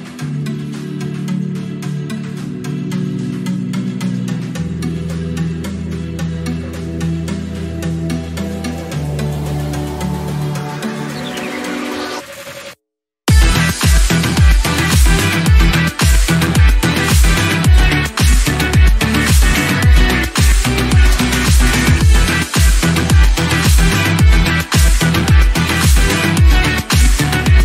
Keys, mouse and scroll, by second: 5.5-6.5 scroll up 4, 6.5-7.0 scroll down 3, 6.9 KP_7, 7.3-7.7 scroll up 4, 7.7 click, 8.2 shift+middle click, 9.0 g, 14.0-15.3 drag, 16.5-17.8 drag, 17.9 click, 18.2 scroll down 11, 18.8 click, 19.3-27.0 drag.